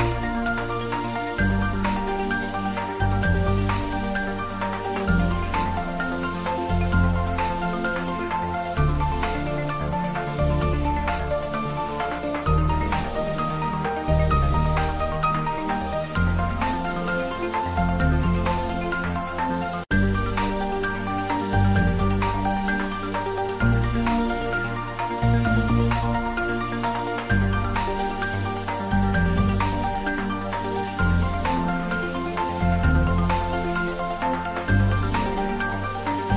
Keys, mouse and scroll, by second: 4.3 ctrl+s, 5.5 middle click, 5.5 middle click, 6.6-7.7 ctrl+middle drag, 7.8-8.1 ctrl+middle drag, 8.2-9.5 shift+middle drag, 15.0 shift+middle click, 15.9 click, 16.2 right click, 16.5 click, 17.1 shift+a, 21.9 click, 24.6 click, 25.3 ctrl+middle click, 25.7 right click, 25.9 shift+a, 26.9 click, 29.4 s, 30.7 x, 32.2 click, 32.5 ctrl+middle click, 34.6 s, 35.4 click, 35.6 ctrl+middle click, 36.2-36.3 shift+middle drag.